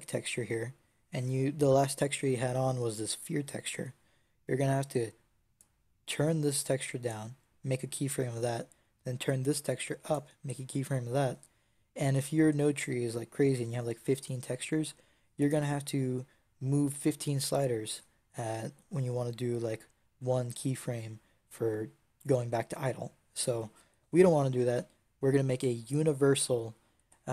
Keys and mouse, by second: 5.4-8.3 drag, 9.4-17.9 drag, 21.9-27.3 drag.